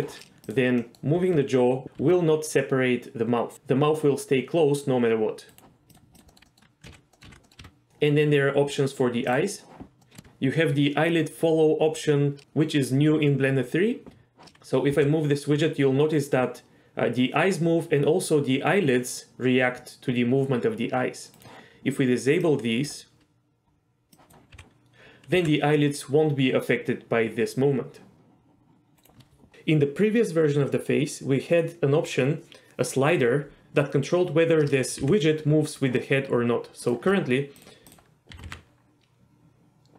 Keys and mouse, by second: 0.8 middle drag, 1.2 r, 2.0 r, 6.3 middle drag, 6.4 s, 6.4 middle click, 6.9 ctrl+z, 7.1 middle click, 7.3 ctrl+z, 7.4 middle click, 7.6 r, 10.0 middle click, 10.2 shift+middle click, 14.6 g, 14.9 g, 22.5 click, 24.1 click, 24.5 g, 25.4 g, 29.0 right click, 35.0 g, 35.7 right click, 37.9 click, 38.3 r, 38.5 r.